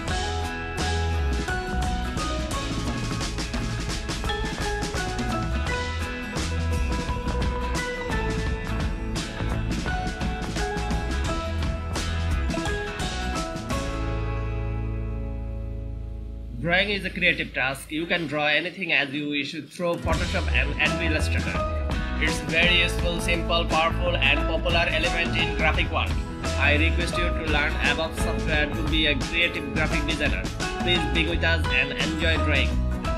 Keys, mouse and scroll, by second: 1.3 super+click, 4.0 super+click, 5.9-8.4 super+drag, 8.7 super+click, 10.9-12.5 super+drag.